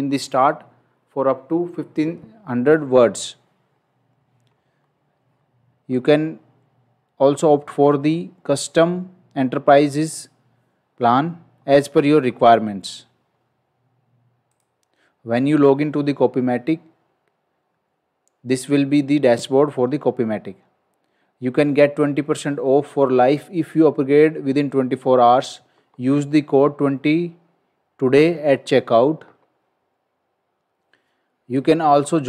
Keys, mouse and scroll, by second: 4.7 scroll up 1, 5.3-5.8 scroll down 1, 5.8 scroll up 1, 11.6 scroll down 1, 13.2 scroll up 1, 14.5 click.